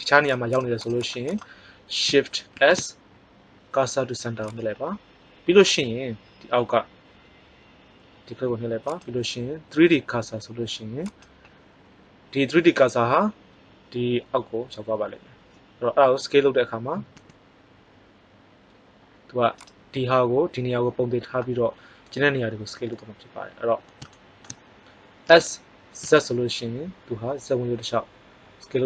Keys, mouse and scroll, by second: 2.5 shift+s, 8.8-10.7 drag, 17.0 s, 23.7 middle click, 25.2 s.